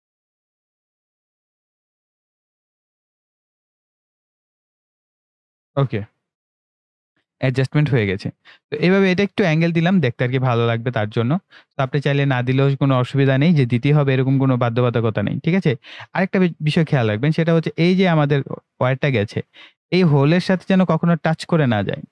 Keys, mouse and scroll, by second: 5.6-6.3 scroll down 2, 16.1-16.6 scroll up 1, 16.9-17.2 ctrl+scroll up 1, 19.1-19.5 ctrl+scroll up 1.